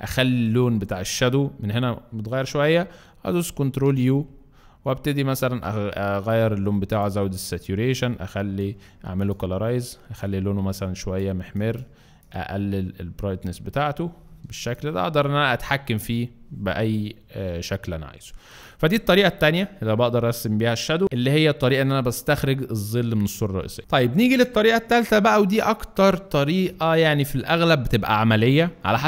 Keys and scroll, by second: 3.8 ctrl+u.